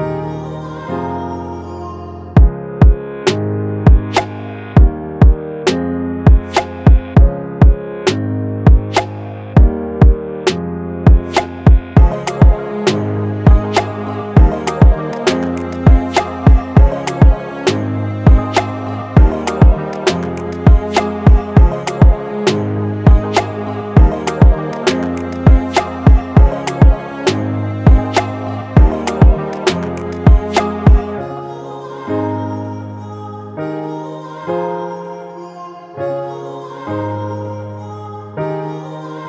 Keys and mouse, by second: 1.2 click, 4.1-7.4 drag, 7.4 right click, 7.9 click, 9.3 right click, 9.7-13.6 drag, 13.6-15.5 drag, 15.8 click, 19.8 click, 22.2 right click, 22.7-28.3 drag, 28.5-33.2 drag, 33.2 right click, 35.0-38.7 drag.